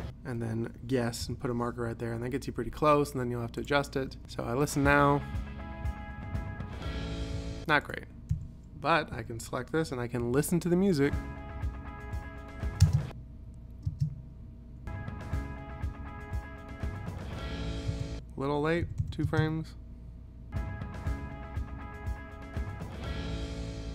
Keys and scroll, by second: 1.3 ;, 4.2 space, 7.4 space, 8.4 u, 9.2 p, 10.3 i, 12.9 space, 18.0 space, 18.9 ,, 19.3 space.